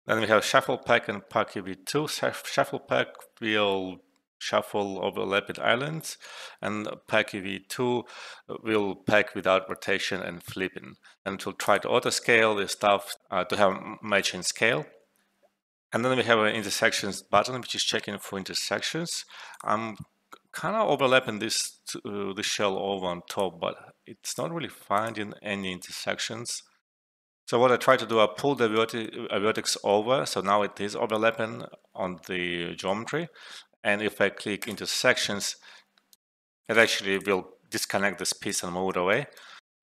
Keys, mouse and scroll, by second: 11.6 click, 19.5-23.6 drag, 27.8 alt+right click, 28.2 alt+middle click, 28.5 alt+right click, 29.2 alt+middle click, 29.5 alt+right click, 31.8 alt+middle click, 33.0 alt+middle click, 34.6 click, 35.8 alt+middle click, 36.1 alt+right click, 36.1 click, 36.7-38.7 drag, 39.4 alt+right click.